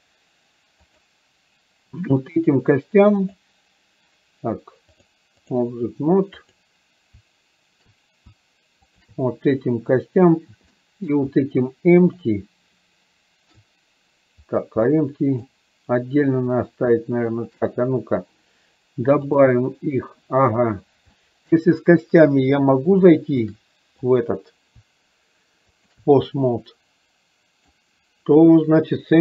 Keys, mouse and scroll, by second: 3.5 click, 5.1-5.7 drag, 6.5-6.8 drag, 10.8 middle click, 12.1 shift+click, 15.0-15.6 middle drag, 19.3-20.3 drag, 21.1-21.6 middle drag, 23.1-23.6 shift+middle drag, 25.8 shift+click, 26.3-27.7 middle drag.